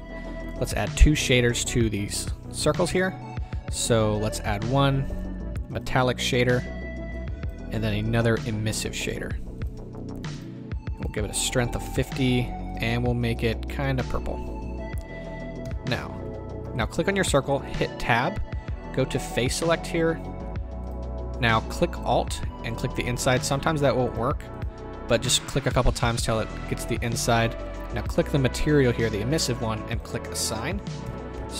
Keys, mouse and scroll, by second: 2.6 Tab, 5.8 click, 7.2-9.1 drag, 10.4-13.4 drag, 12.1 KP_Enter, 15.6 Tab, 16.8 click, 17.7 Tab, 19.2 click, 22.0 alt+click, 24.6 click, 25.3 alt+click, 28.0 click, 31.0 Tab.